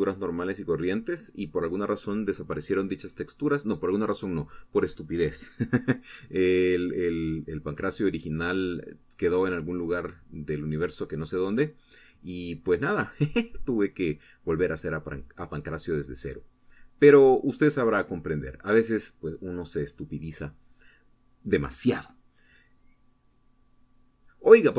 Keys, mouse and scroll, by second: 0.8 Down, 1.6 Left, 2.0 Up, 9.5 Right, 10.1 Up, 11.1 Right, 13.3 Up, 14.6 Left, 15.2 Up, 15.8 Right, 17.5 Right, 19.3 Left, 21.5 Right, 22.1 Left, 23.8 Right.